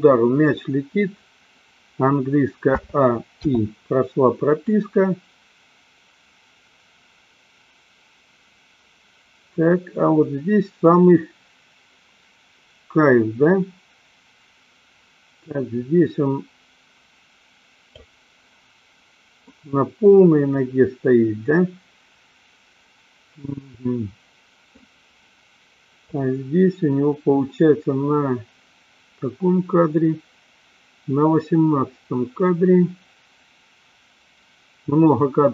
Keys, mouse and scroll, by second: 2.8 a, 3.5 i, 4.9-18.3 drag, 19.5-24.8 middle drag, 26.4-35.5 drag.